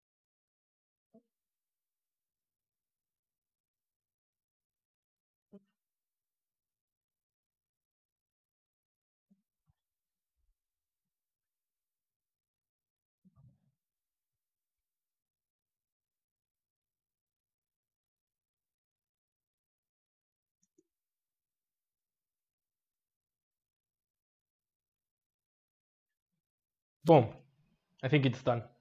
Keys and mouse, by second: 1.7 s, 3.1 click, 3.5 r, 5.2 click, 5.9 click, 6.6-7.7 middle drag, 7.7 click, 8.1 s, 9.1-9.9 middle drag, 9.9 click, 10.5 click, 11.3 click, 18.2-20.3 drag, 20.3 space.